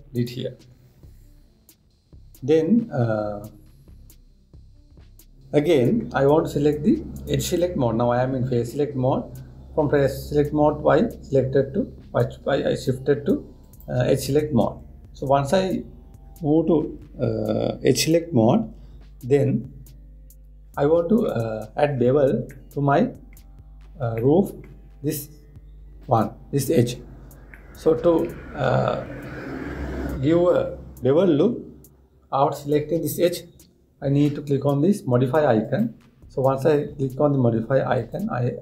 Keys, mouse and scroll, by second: 8.1 click, 14.3-17.4 drag, 23.2-26.7 middle drag, 26.7 click, 28.2-31.3 middle drag, 36.3 click.